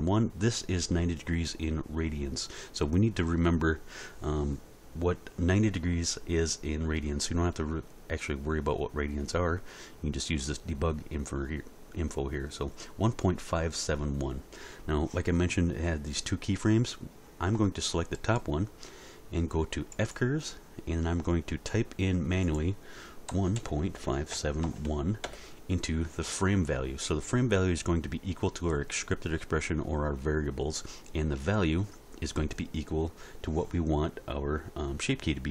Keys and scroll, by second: 23.3-24.7 typing, 25.3 Return.